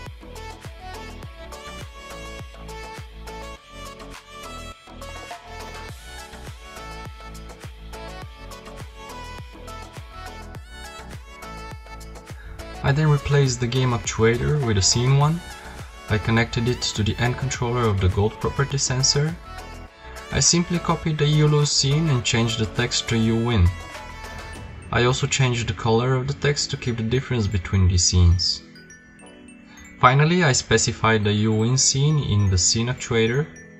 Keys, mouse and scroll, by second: 4.8 p, 6.6 click, 7.3 p, 9.8-15.7 right drag, 16.4-17.9 drag, 18.6 click, 20.2 click, 20.7 BackSpace, 21.1 BackSpace, 22.1 Tab, 22.3-23.7 typing, 23.9 Tab, 27.5 click, 32.8 middle click, 33.3 middle click, 33.6 KP_0.